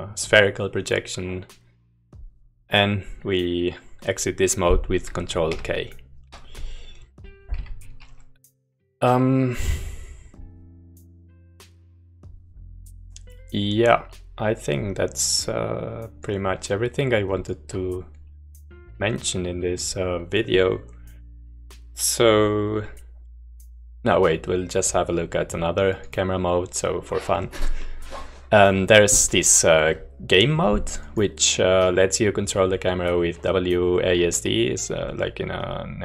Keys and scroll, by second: 6.0 ctrl+k, 7.5 u.